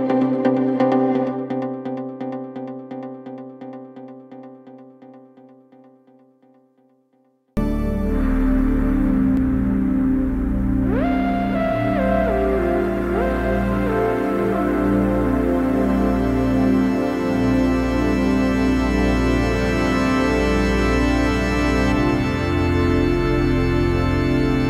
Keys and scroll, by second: 1.2 Caps_Lock, 1.6 s, 2.9 Return, 3.2 s, 3.8 space, 10.4 ctrl+k.